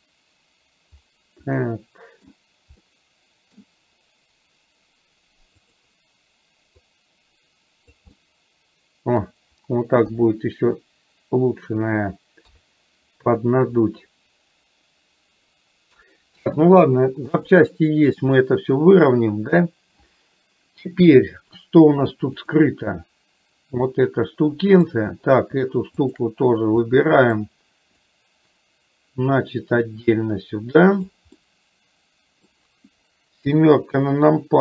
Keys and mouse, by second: 1.6 middle click, 2.8 middle click, 5.7 click, 7.1-8.1 drag, 8.2-9.3 middle drag, 10.2 KP_1, 12.5 KP_3, 17.5 click, 24.0-25.0 middle drag, 27.0 middle click, 28.3-31.2 drag, 31.5-32.7 middle drag, 33.5 KP_7.